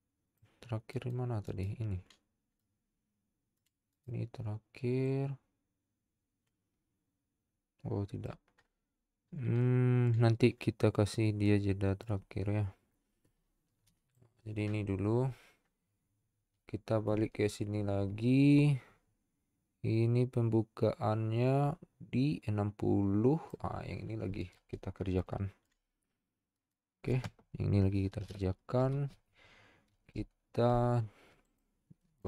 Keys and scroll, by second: 29.9 z.